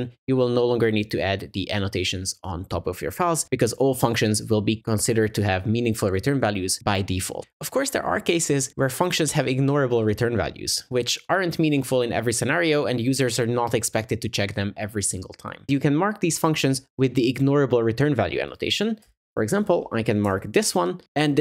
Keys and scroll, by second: 20.3 Tab.